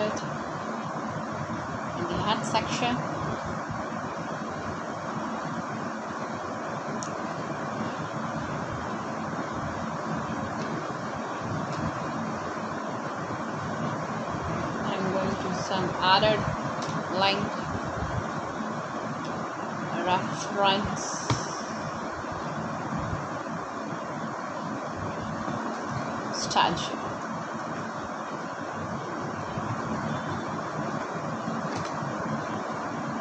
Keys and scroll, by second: 0.0-1.6 typing, 3.7-4.6 typing, 5.8 l, 9.9 =, 10.3 shift+', 11.4-16.2 typing, 19.0 BackSpace, 23.4-27.1 typing, 28.3 BackSpace, 28.7 shift+'.